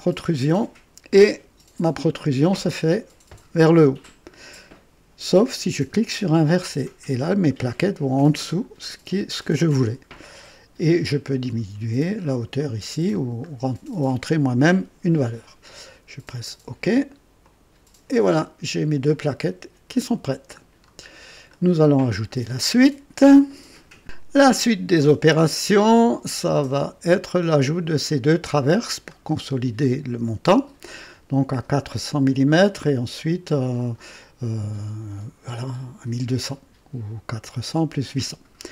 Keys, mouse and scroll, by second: 6.3 click, 11.2-12.1 scroll down 5, 12.5 scroll down 2, 13.1 scroll down 2, 17.4 click, 18.3-18.6 scroll down 2, 19.1-20.3 drag, 20.8 scroll down 2, 21.5-22.5 right drag, 26.3 click.